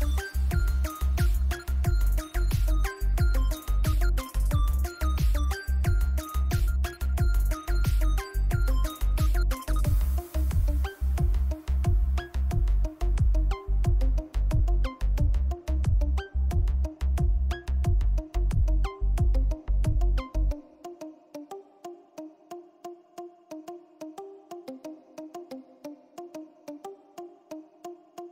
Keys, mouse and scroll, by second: 0.9-4.9 drag, 4.9 right click, 5.5 click, 6.8 z, 7.0 right click, 7.5 click, 11.2-12.6 drag, 12.9-13.7 typing, 14.5-18.2 drag, 18.2-22.1 drag, 22.1 z, 22.2 right click, 23.1 click, 26.1-28.3 drag.